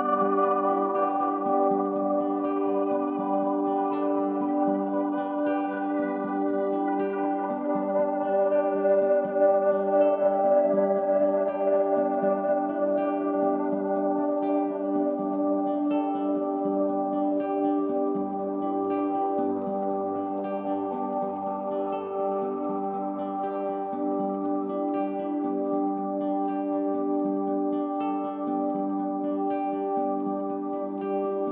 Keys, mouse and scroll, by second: 3.6-7.8 drag, 9.9-12.1 drag, 12.1-14.7 middle drag, 14.7 click, 20.2-21.6 middle drag, 21.6 click, 22.8 click, 27.1-31.5 middle drag.